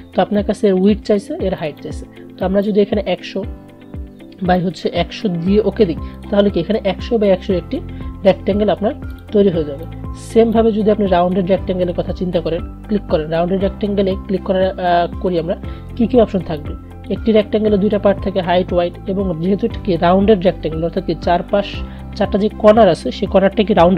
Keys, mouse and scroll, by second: 0.5 click, 9.2-19.6 drag.